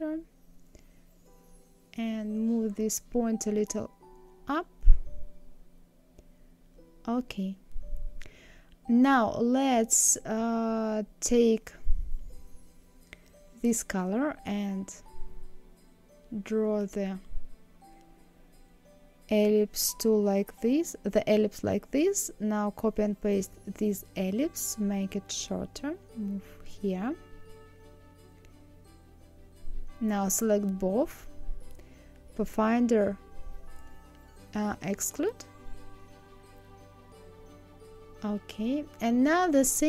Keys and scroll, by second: 20.3 ctrl+c, 20.8 ctrl+f.